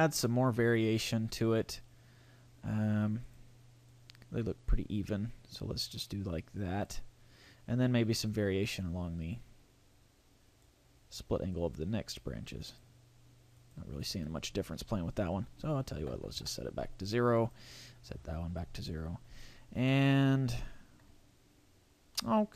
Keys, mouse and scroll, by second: 3.2 click, 3.9 click, 8.3 click, 11.5 click, 13.6 click, 17.4 click, 19.8 middle click, 22.1 middle click.